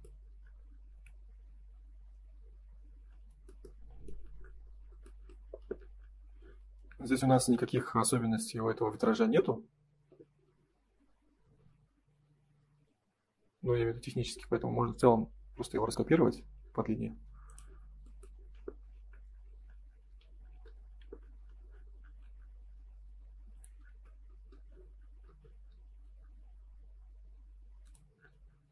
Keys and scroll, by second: 18.9 ctrl+s, 20.9 F3.